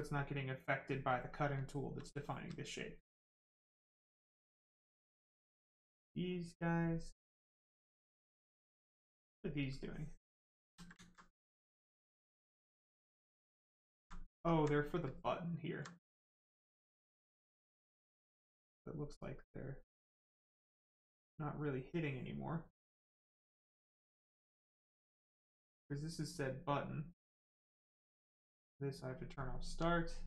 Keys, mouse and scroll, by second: 1.2 right click, 2.6 alt+right click, 6.3 click, 7.3 right click, 9.8 shift+click, 10.6 ctrl+z, 11.0 alt+right click, 12.5 right click, 13.6 alt+right click, 14.1 right click, 14.2 right click, 14.5 alt+right click, 15.0 alt+right click, 17.5 right click, 19.1 click, 24.9 click, 28.3 click, 29.3 right click.